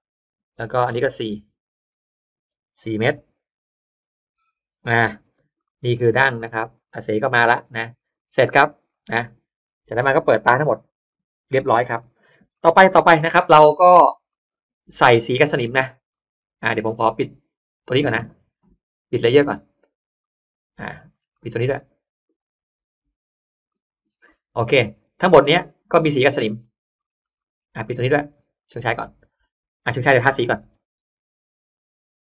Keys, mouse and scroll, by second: 1.1 click, 3.1 4, 4.3 Return, 5.2 space, 5.5 middle click, 5.9-6.2 scroll down 1, 6.4 space, 6.7-7.0 scroll up 1, 7.0 middle click, 7.6 scroll down 1, 8.1 middle click, 8.1 scroll up 1, 8.2 scroll down 1, 8.5 scroll up 1, 8.5 middle click, 8.7 scroll down 1, 9.1 scroll up 1, 9.1 middle click, 9.3 scroll down 1, 9.6 scroll up 1, 11.0 click, 11.6-12.5 scroll down 2, 11.9 middle click, 12.2 space, 12.5 middle click, 12.9-13.5 scroll up 1, 13.2 middle click, 13.9-14.5 scroll up 2, 14.9-15.3 scroll up 1, 15.0 middle click, 15.3-15.7 scroll down 1, 15.7 scroll up 1, 15.7-16.6 scroll down 2, 16.1 middle click, 16.6 middle click, 17.0 scroll up 1, 17.1 middle click, 17.4 click, 20.1 click, 20.6 scroll up 1, 20.7 middle click, 20.8 click, 20.9 scroll down 1, 21.1-21.5 scroll up 1, 22.1 click, 23.5 click, 23.9 middle click, 23.9-24.3 scroll down 1, 24.5 middle click, 24.8-25.2 scroll up 1, 25.3 space, 25.3 middle click, 25.6 scroll up 1, 26.1 click, 26.9-27.3 scroll up 1, 27.3 middle click, 27.7-28.1 scroll up 1, 28.5 click, 30.4 b, 31.2 click.